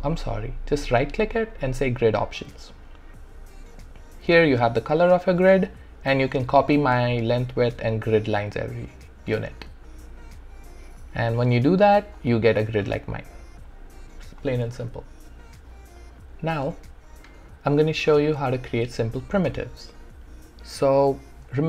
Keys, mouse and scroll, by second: 2.3 click, 12.2 click, 16.6 alt+middle click.